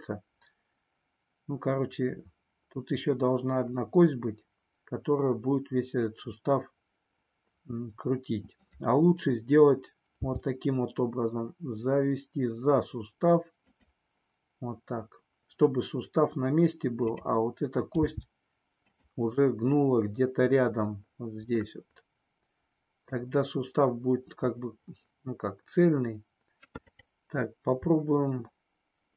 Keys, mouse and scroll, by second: 10.1 g, 17.0 click, 18.0 g, 21.7-23.1 middle drag.